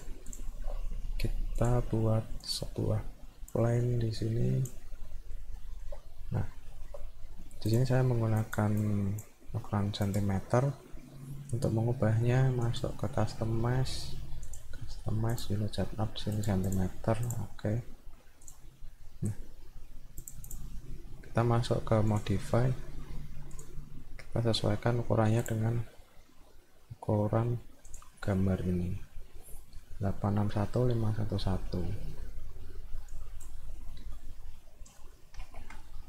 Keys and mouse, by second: 0.3 click, 1.6 click, 2.4 click, 3.6-4.7 drag, 5.1 middle click, 5.6 alt+middle click, 6.2 middle click, 6.7 alt+middle click, 7.7 click, 8.4 click, 8.8 click, 10.1 click, 12.7 click, 14.4 click, 15.3 click, 16.3 click, 16.7 click, 17.2 click, 18.5 click, 19.0 middle click, 20.2 click, 22.1 click, 23.5 click, 25.5 click, 27.9 click, 33.1 click.